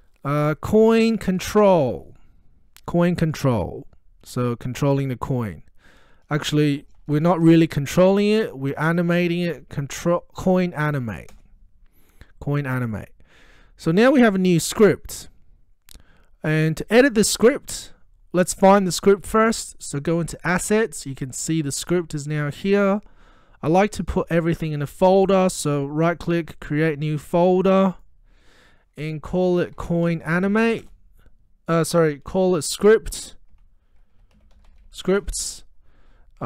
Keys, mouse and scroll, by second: 0.5-2.5 typing, 4.3 typing, 6.6 BackSpace, 8.7-11.0 typing, 11.3 Return, 20.6 click, 26.1 right click, 27.3 click, 29.5-31.3 typing, 33.5 Return, 33.6 F2, 33.9-35.5 typing.